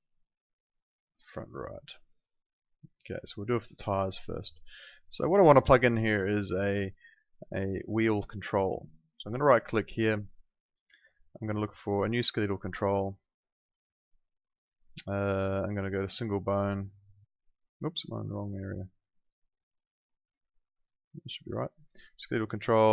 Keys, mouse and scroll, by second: 1.3 click, 9.4 right click.